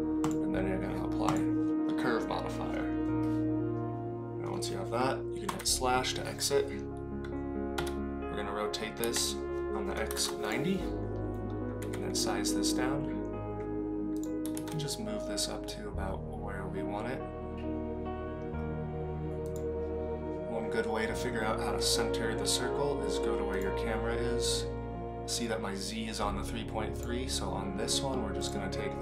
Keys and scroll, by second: 7.7 r, 11.8 s, 14.4 g.